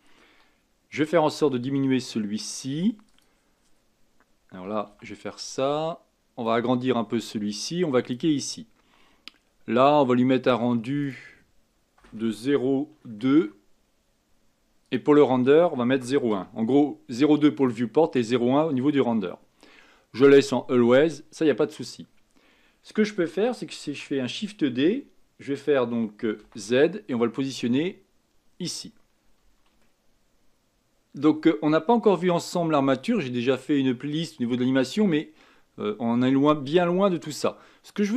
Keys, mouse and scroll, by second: 6.4-8.1 drag, 11.0-13.8 drag, 14.8-17.7 drag, 23.8 shift+d, 29.8 shift+middle click, 37.4-37.8 scroll down 1, 37.8-38.1 scroll up 2.